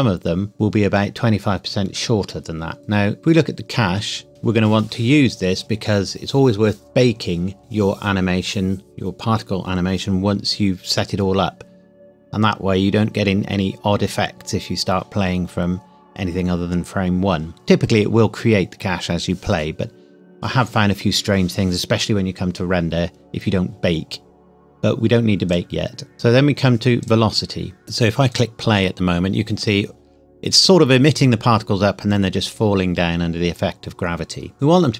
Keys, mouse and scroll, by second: 3.2 click, 25.4 click, 26.1 scroll down 1, 27.0 click, 27.8 middle click, 28.3 click.